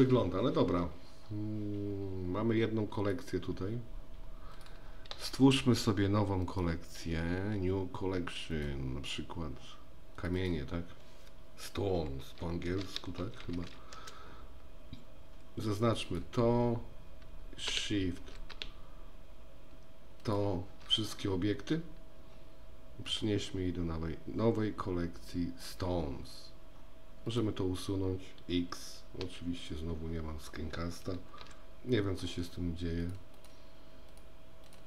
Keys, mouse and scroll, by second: 3.1 click, 4.5 click, 6.6-8.7 right drag, 10.5-15.4 drag, 16.1 click, 23.2-25.6 drag, 29.4 typing, 31.4 n, 33.1 click, 33.4 click.